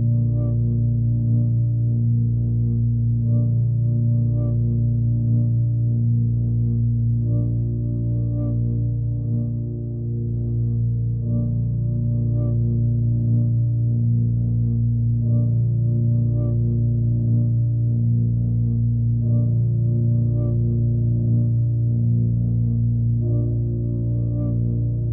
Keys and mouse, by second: 0.0 click, 0.7 click, 1.5-3.5 drag, 5.3 drag, 6.1 click, 6.4 click, 7.3-8.0 typing, 9.3 click, 10.0 drag, 10.6 click, 11.7-12.8 drag, 14.7-15.7 drag, 18.1-20.2 drag, 22.0-23.1 drag, 24.9 drag.